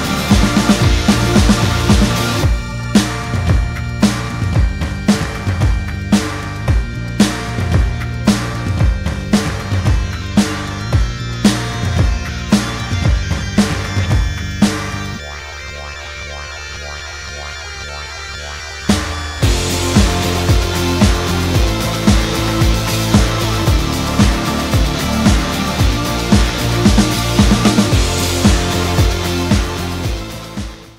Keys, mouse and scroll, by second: 1.7 F12, 9.2 middle click, 11.3-12.6 scroll up 2, 12.6 middle click, 13.6 scroll up 1, 13.8-14.2 scroll down 1, 14.2 middle click, 15.1-15.7 scroll down 1, 15.7 middle click, 16.9 ctrl+alt+KP_0, 17.5 scroll down 1, 19.1 shift+middle click, 20.5 g, 21.9 scroll down 2, 22.1 middle click, 22.8 scroll down 2, 24.0 ctrl+alt+KP_0, 24.6-25.4 scroll up 3, 25.5 shift+i, 26.7 KP_0, 26.9 KP_Enter, 30.0 KP_6, 30.2 0, 30.5 Return.